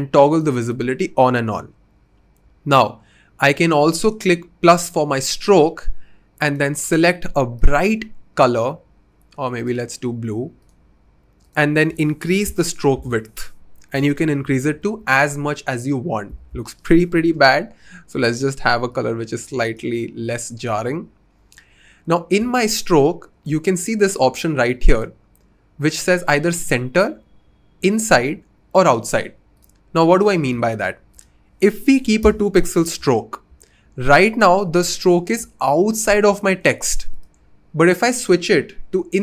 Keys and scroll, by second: 12.3 2, 12.4 Return, 13.8 Up, 14.0 Up, 14.2 Up, 14.4 Up, 14.5 Up, 14.7 Up, 16.3 Down, 16.5 typing, 32.0 2, 32.2 Return.